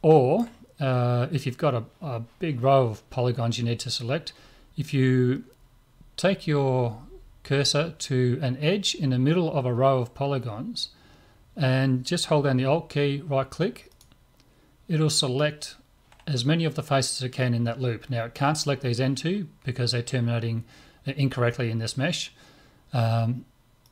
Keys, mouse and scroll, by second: 1.6-3.9 middle drag, 3.9-4.5 scroll up 1, 4.5-5.5 scroll up 1, 5.5-6.7 scroll up 1, 6.7-7.6 scroll up 1, 7.6-9.5 middle drag, 13.9 right click, 23.8 right click.